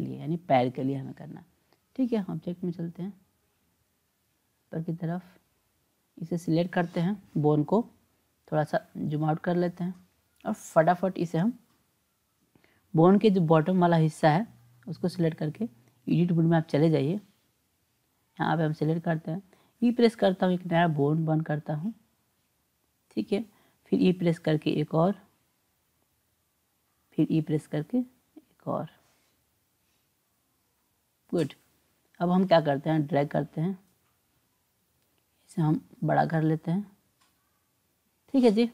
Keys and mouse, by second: 4.3-5.6 drag, 6.6 click, 8.7-10.5 drag, 12.3 click, 13.6 click, 15.7-16.8 drag, 18.2 click, 19.6 e, 23.9 e, 27.3 e, 33.0-34.3 drag, 36.0-37.4 drag.